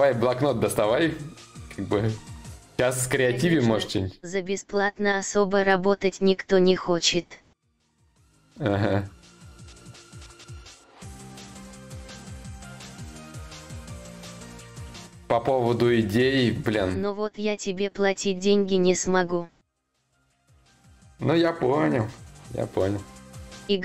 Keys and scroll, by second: 17.8 ctrl+z.